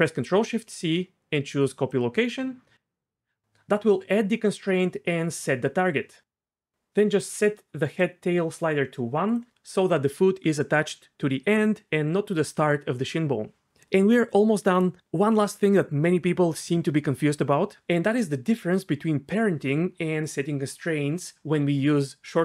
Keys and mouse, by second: 0.4 ctrl+shift+c, 8.0-9.3 drag.